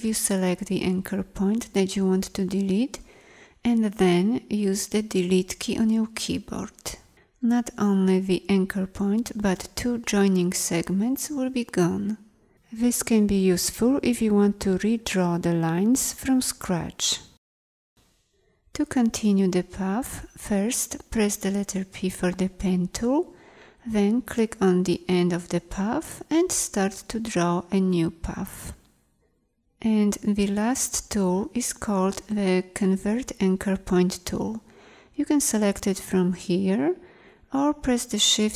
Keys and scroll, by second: 0.0 a, 5.1 Delete, 21.2 p.